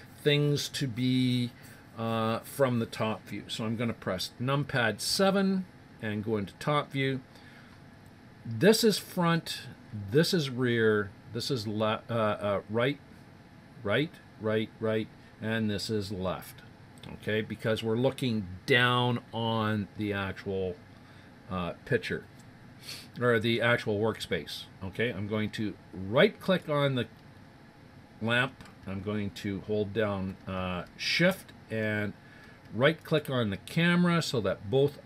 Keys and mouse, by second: 5.1 KP_7, 26.4-28.2 right drag, 33.0 right click.